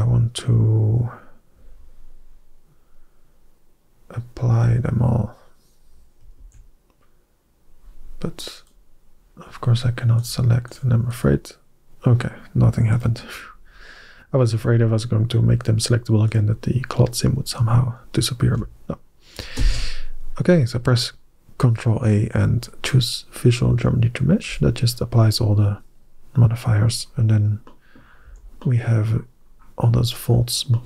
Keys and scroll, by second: 6.2 ctrl+a, 19.4 ctrl+a, 28.1 Tab.